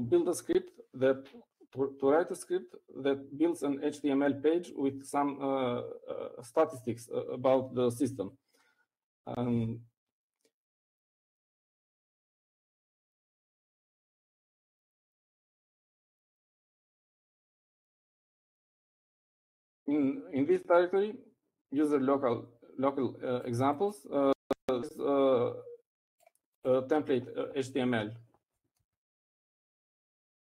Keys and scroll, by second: 13.5 typing, 15.9-20.0 typing.